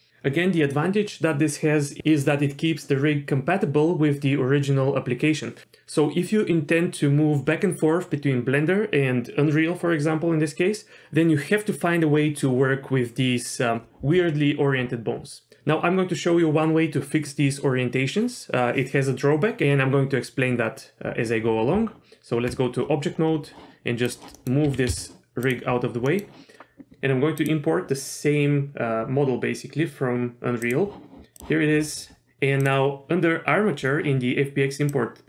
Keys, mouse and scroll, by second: 21.7 Tab, 22.8-24.0 scroll down 3, 24.0 click, 24.0 scroll down 1, 24.3 middle click, 24.6 g, 25.7-26.1 scroll down 1, 26.1 middle click, 27.4-30.8 drag.